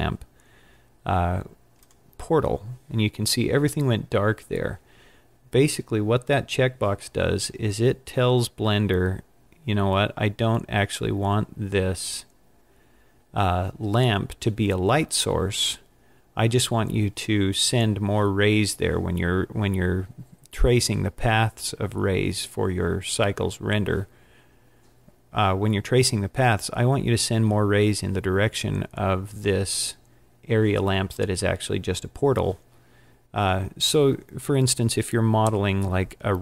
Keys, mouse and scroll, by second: 1.9 click, 8.6-9.1 scroll up 7, 9.6-11.1 scroll up 13, 11.1-11.7 scroll up 3, 11.7-13.3 scroll down 13, 13.3-14.0 scroll up 4, 14.0 scroll up 3, 14.8-16.5 scroll down 11, 18.1 scroll down 1.